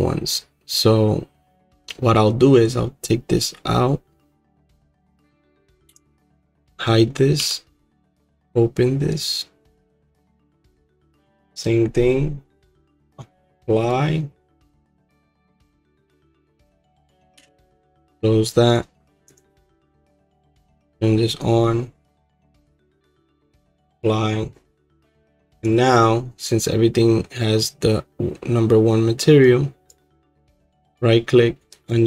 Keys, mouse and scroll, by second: 3.1 click, 5.9 h, 6.9 click, 7.4 h, 9.2 click, 13.9 right click, 15.3-17.3 drag, 17.3 h, 18.2 click, 18.7 click, 19.4 click, 19.8 h, 20.8 click, 21.4 click, 23.7-26.5 right drag, 26.5-29.9 drag, 29.9 right click, 30.3-32.0 drag.